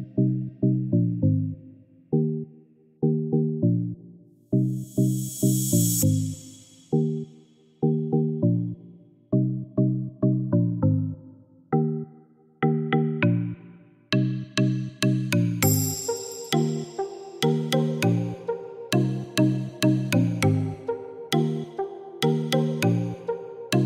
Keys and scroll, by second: 14.4 8, 14.7 Return, 20.8-21.7 typing.